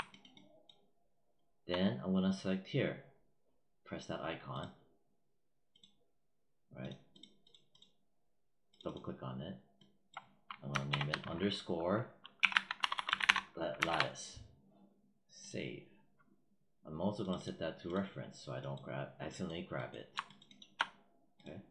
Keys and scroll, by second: 10.7 shift+-, 12.0-13.7 typing.